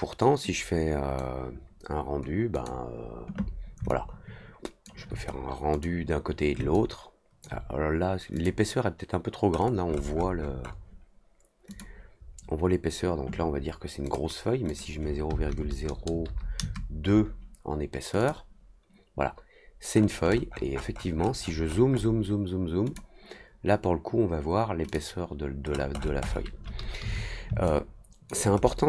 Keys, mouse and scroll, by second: 0.5-1.1 drag, 2.5 click, 3.8 alt+click, 5.7 click, 6.7 alt+click, 8.3 click, 9.5 middle click, 9.8 middle click, 10.1 middle click, 10.3 middle click, 10.6 middle click, 14.0 click, 14.6 click, 18.1 click, 19.9 middle click, 20.2 middle click, 20.4 middle click, 20.4 scroll up 1, 21.8 middle click, 21.8 scroll up 1, 22.8 click, 24.8 click, 25.6 middle click, 25.9 middle click, 26.2 middle click, 27.6-28.2 alt+drag, 28.5 middle click.